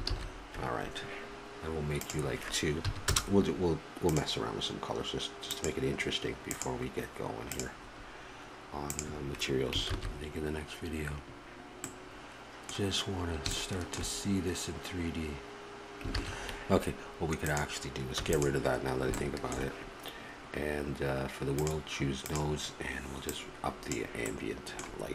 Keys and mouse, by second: 0.2 shift+z, 2.0-6.5 drag, 7.7-9.5 drag, 9.9 shift+z, 16.4 shift+z, 17.5-19.2 drag, 18.2 x, 19.2-24.2 middle drag, 24.3-25.1 middle drag.